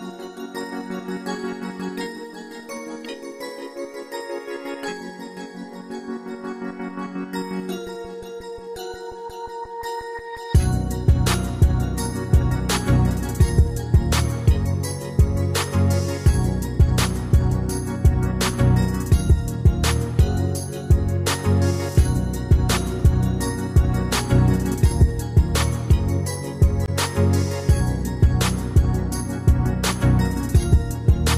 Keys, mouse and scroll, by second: 20.5 ctrl+scroll up 1, 30.1 ctrl+scroll down 1.